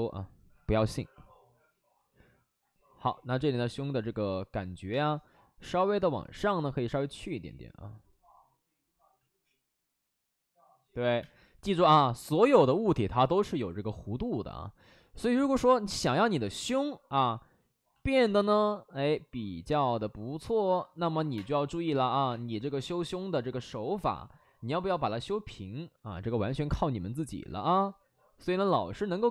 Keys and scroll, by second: 4.8 space, 11.1 space, 17.1 1, 18.1 ctrl+z, 21.3 space, 21.5 3, 22.2 space, 22.5 2, 26.4 space, 28.4 space.